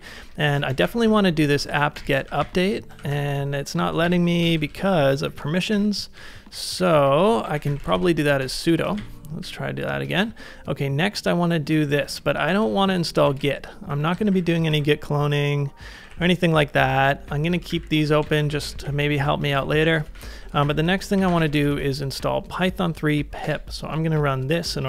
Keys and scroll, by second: 0.0-3.2 typing, 1.9 Return, 2.3 ctrl+a, 3.0 ctrl+a, 4.1 Up, 4.4 alt+Left, 5.3 ctrl+c, 5.7 Up, 6.2 Up, 6.5 Up, 6.8 Down, 6.9 Down, 7.1 Down, 7.4-7.7 typing, 7.9 super+v, 8.4 Return, 8.9 ctrl+a, 9.4 j, 10.1 shift+v, 11.9 ctrl+c, 12.2-14.5 typing, 14.2 ctrl+c, 15.9 d, 17.5-19.5 typing, 18.1 ctrl+c, 20.5 ctrl+a, 20.6-22.0 typing, 23.4 Return.